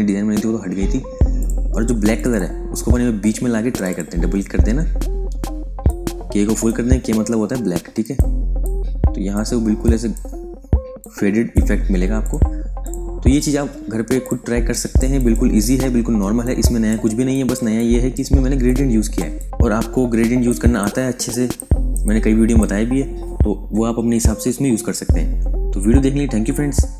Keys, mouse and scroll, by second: 1.3 click, 13.6 v, 14.1 click, 14.4 space, 14.6 click, 15.1 ctrl+click, 15.7 f, 16.1 space, 16.3 click, 16.7 space, 17.2 ctrl+click, 18.6 ctrl+alt+click.